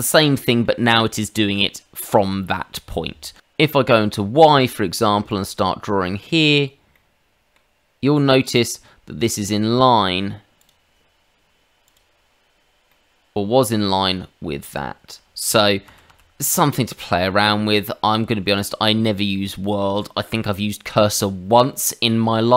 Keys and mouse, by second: 0.3 middle click, 2.9 middle click, 3.4 click, 5.3 click, 6.9 middle click, 10.6 click, 11.8 click, 12.9 middle click, 15.8 ctrl+z, 16.1 ctrl+z, 18.4 click.